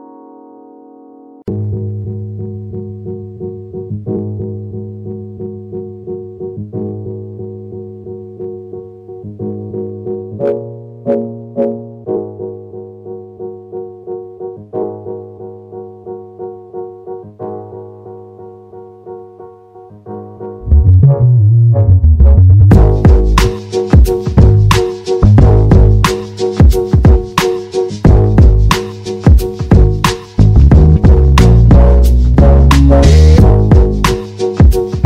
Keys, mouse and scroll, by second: 2.2 s, 8.1-9.9 drag, 9.9-11.2 right drag, 11.5 r, 14.9 e, 19.9 r, 27.1 e, 31.2 r.